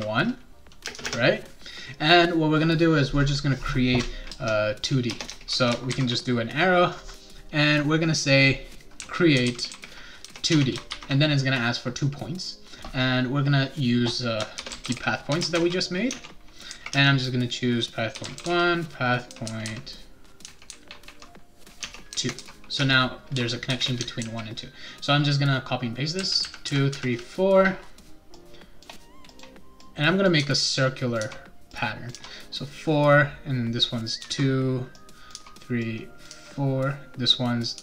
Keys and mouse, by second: 0.0-1.0 typing, 4.3-5.9 typing, 8.7-10.9 typing, 10.5 Tab, 14.3-18.9 typing, 16.1 Tab, 21.8 Tab, 22.1-22.9 typing, 24.2 ctrl+c, 26.1 ctrl+v, 26.4 ctrl+v, 26.7 ctrl+v, 26.9 ctrl+v, 28.3 click, 29.3 click, 29.8 click, 30.4 2, 30.7 click, 31.2 3, 31.7 click, 32.1 4, 33.8 click, 34.2 2, 34.9 click, 35.3 3, 35.8 click, 36.3 4, 37.3 click, 37.7 3.